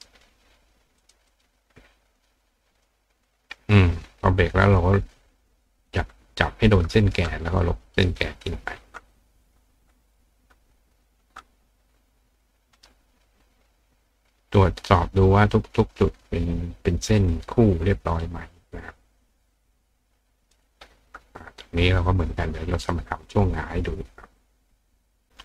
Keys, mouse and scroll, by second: 1.0 click, 1.3 click, 2.2 click, 2.8 click, 3.3 click, 4.4 click, 5.9 click, 6.8 click, 8.0 click, 9.4 click, 10.9 click, 11.5 click, 12.4 click, 12.8 right click, 17.3-18.9 drag, 20.0 click, 22.8 click.